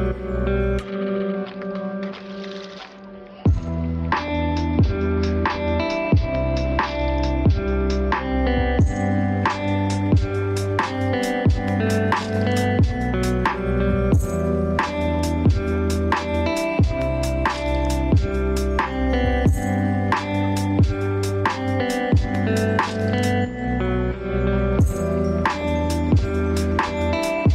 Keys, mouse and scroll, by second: 3.8 ctrl+d, 6.1 scroll up 1, 8.3 space, 8.5 click, 8.8 space, 10.5 click, 11.6 alt+right click, 12.3 click, 13.3 click, 14.5 scroll down 1, 14.7 scroll up 1, 14.8 alt+right click, 15.0 click, 15.6 scroll down 1, 15.8-16.1 scroll up 1, 16.1 click, 17.3 alt+right click, 17.4 scroll up 1, 17.6 click, 17.9 space, 18.4 click, 18.7-19.1 scroll down 1, 19.1 alt+right click, 19.3 click, 19.6 scroll down 1, 19.8 scroll up 1, 20.0 click, 21.1 alt+right click, 21.5 click, 21.8 scroll down 1, 22.1 scroll up 1, 22.3 scroll down 1, 25.8 click, 27.3 right click.